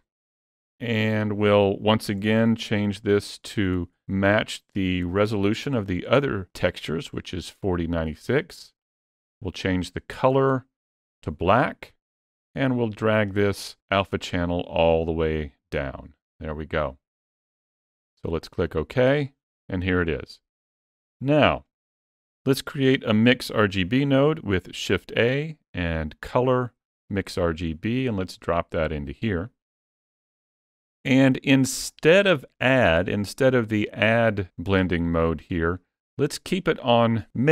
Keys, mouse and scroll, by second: 20.6-22.3 scroll down 3, 21.4 middle click, 22.3 click, 23.4-23.7 scroll up 3, 23.7 shift+middle click, 24.8 shift+a, 29.9-31.2 scroll up 4, 31.2 middle click, 33.2 click, 34.5 scroll up 3, 34.9 shift+middle click.